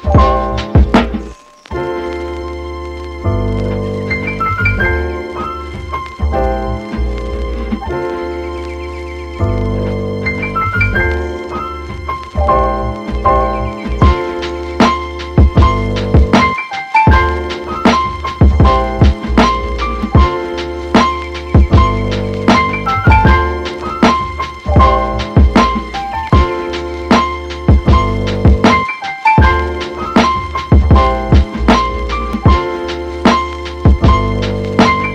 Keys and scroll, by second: 28.7 super+z.